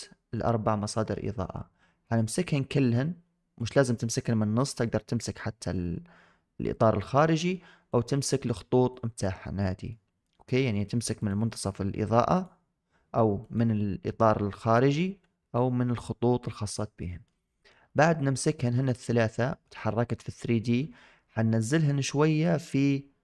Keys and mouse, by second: 1.9 click, 3.4 click, 5.0 click, 7.2 shift+middle drag, 7.8-8.3 drag, 8.9 click, 9.8-10.1 shift+middle drag, 13.3 click, 14.6-16.3 drag, 17.0 shift+middle click, 18.0-18.3 middle drag, 18.5 shift+middle drag, 19.0 middle drag, 19.4 shift+middle drag, 19.7-20.6 middle drag.